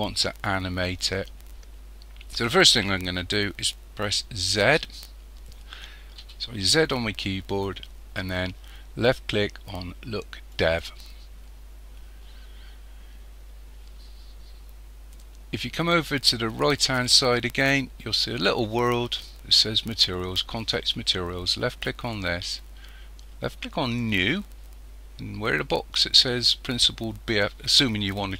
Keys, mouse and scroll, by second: 4.5 z, 6.2 z, 21.9 click, 23.8 click.